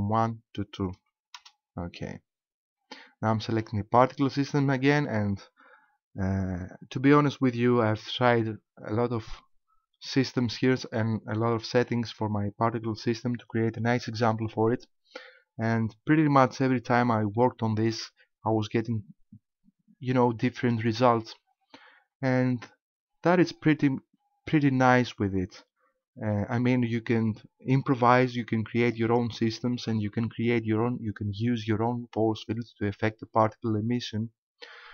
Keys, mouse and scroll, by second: 0.2 click, 4.8 right click, 17.4 shift+middle click, 23.8 middle click, 28.8 click.